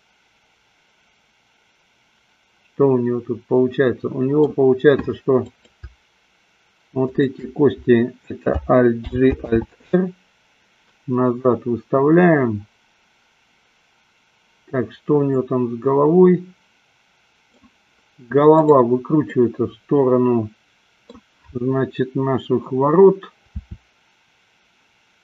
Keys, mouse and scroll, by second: 0.0-4.5 middle drag, 5.4-6.5 drag, 7.4 shift+click, 9.4 alt+g, 9.8 alt+r, 16.1-17.9 middle drag, 18.8-19.5 drag, 19.6-21.5 middle drag, 23.5 r.